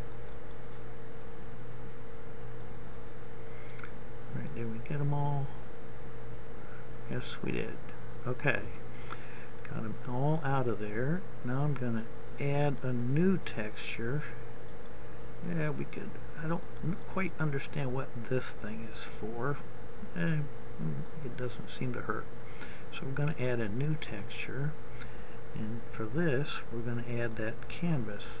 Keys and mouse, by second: 2.5 right click, 2.7 middle click, 3.3-7.0 drag, 15.7-22.5 drag, 16.6-18.1 right drag.